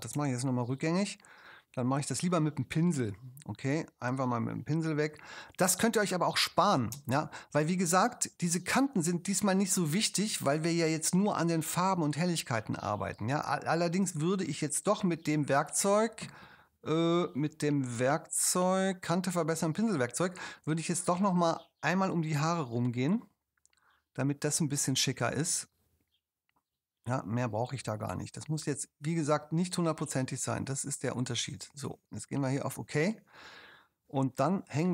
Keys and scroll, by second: 0.4 super+z, 6.9 space, 10.2 space.